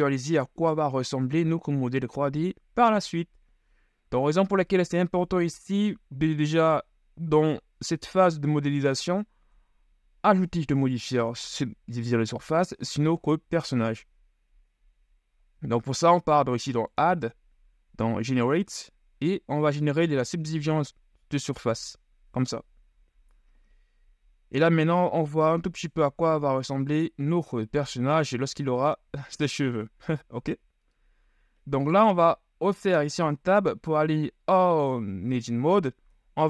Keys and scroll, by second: 5.6 KP_1, 9.6 Tab, 25.8 KP_3, 27.5 KP_1, 28.9 z, 33.2 Tab, 36.3 KP_3.